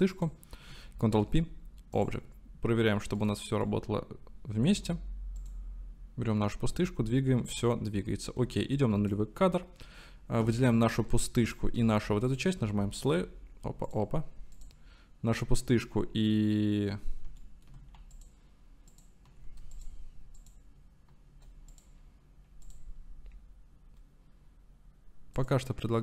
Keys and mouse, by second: 1.1 ctrl+p, 3.3 click, 3.7-4.8 drag, 5.4 click, 6.7 g, 7.6-8.0 drag, 8.7 click, 14.6-17.4 drag, 17.5 shift+drag, 19.7 shift+click, 25.4 click.